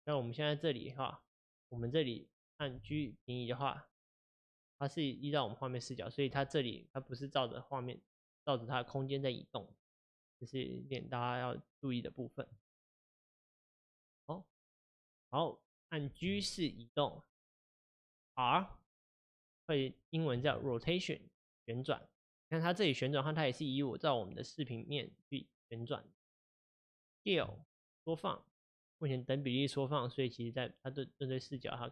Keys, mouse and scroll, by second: 2.7 click, 2.8 g, 11.9-13.2 drag, 13.2 middle click, 14.2 click, 16.2 g, 20.4 r, 27.5 s, 31.8-31.9 middle drag.